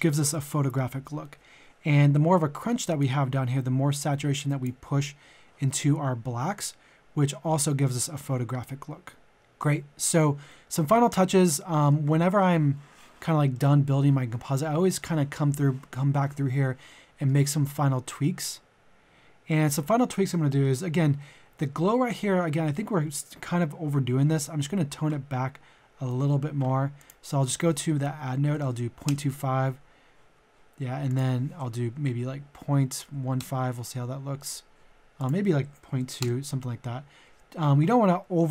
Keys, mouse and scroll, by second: 9.3 middle click, 14.0-14.3 scroll down 1, 14.9-17.6 middle drag, 17.6-18.0 scroll up 1, 18.2-20.0 middle drag, 25.3 scroll up 1, 26.1 middle click, 28.1 KP_Decimal, 28.3 KP_2, 28.5 KP_5, 31.1 click, 31.8 KP_Decimal, 32.9 KP_1, 33.0 KP_5, 35.1 click, 35.8 KP_Decimal, 36.0 KP_2.